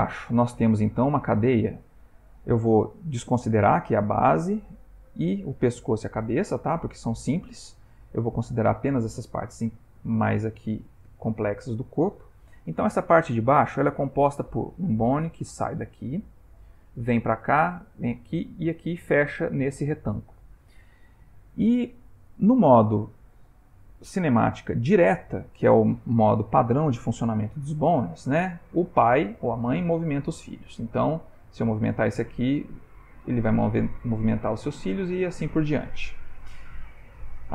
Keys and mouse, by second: 4.6 ctrl+middle click, 8.3 ctrl+middle click, 10.8 shift+middle click, 11.2 shift+middle click, 24.0 click, 29.2 r, 31.3 click, 31.7 r, 33.0 click, 33.3 r, 34.6 click, 34.9 r.